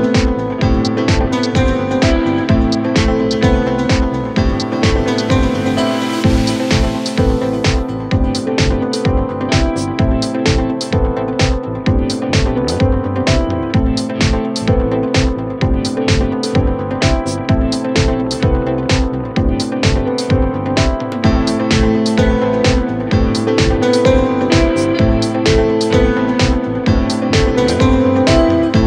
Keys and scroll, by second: 3.9 f, 15.6 Delete, 17.9 4, 19.6 3, 20.3 ].